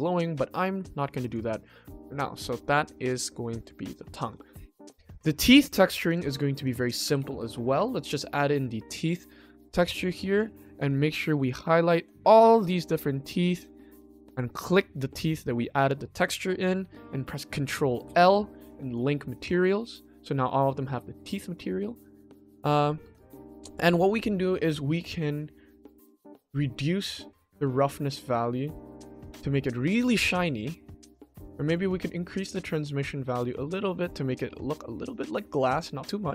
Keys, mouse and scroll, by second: 1.9-2.3 middle drag, 2.3-2.8 scroll down 2, 3.3 middle drag, 4.2 ctrl+s, 4.6 click, 6.0 click, 6.6-7.7 drag, 7.1 e, 8.9-9.5 ctrl+middle drag, 9.7-10.1 shift+middle drag, 10.5 click, 11.4 shift+click, 12.0 shift+click, 12.9 shift+click, 13.6 shift+click, 14.6 shift+click, 19.4 click, 20.1 click, 20.4 click, 20.8 click, 21.4 click, 21.9 scroll up 1, 22.6-22.9 shift+middle drag, 23.3 ctrl+middle click, 25.9-27.0 scroll up 1, 27.0 scroll up 1, 27.0-29.9 drag, 30.5 shift+middle click, 31.5 ctrl+s, 32.2-35.3 drag, 35.7 click.